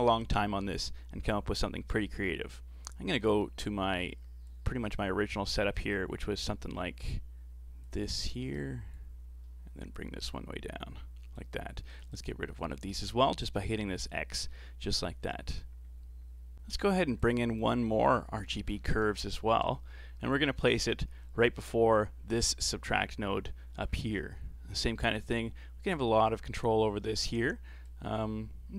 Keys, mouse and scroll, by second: 3.2-16.5 drag, 16.5 middle click, 17.0 shift+a, 19.2 Down, 23.9-24.3 scroll up 5, 24.3-26.3 middle drag, 26.3-28.7 drag.